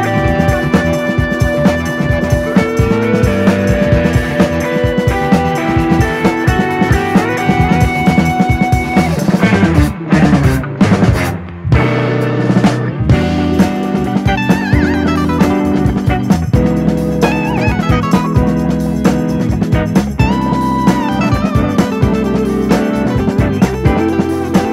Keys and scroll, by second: 14.0 super+d.